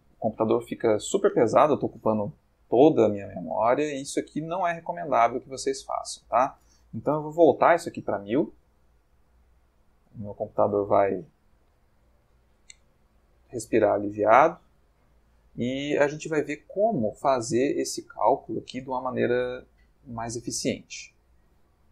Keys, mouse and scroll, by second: 5.7 click, 7.5 1, 7.6 0.